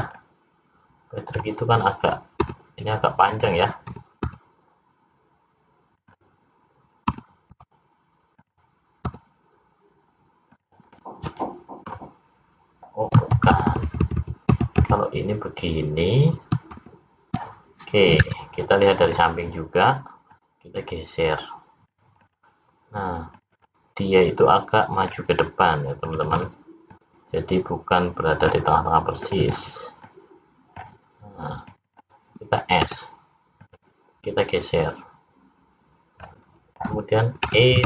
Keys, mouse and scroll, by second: 0.1 click, 2.4 s, 3.9 e, 7.1 e, 9.1 s, 11.0 middle click, 13.4 ctrl+z, 13.7-14.2 ctrl+z, 14.6 ctrl+z, 14.9 ctrl+z, 16.7 ctrl+z, 18.2 `, 20.3 click, 22.2 click, 23.4 click, 24.3 click, 26.1 click, 26.3 click, 26.9 click, 29.3 click, 29.5 click, 30.0 click, 31.7 click, 31.9 click, 32.8 s, 34.3 click, 37.5 e.